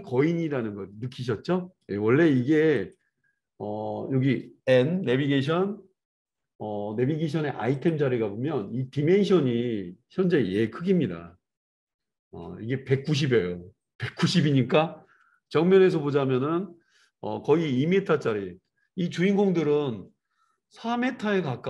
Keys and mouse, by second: 2.8 click, 4.6-7.7 middle drag, 5.4 n, 7.7 click, 7.8-21.6 middle drag, 15.2 KP_1.